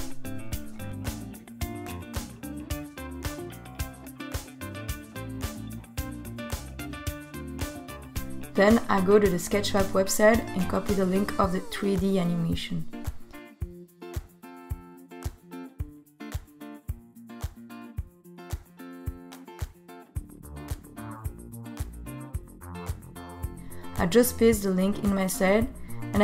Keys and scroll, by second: 25.4 super+v.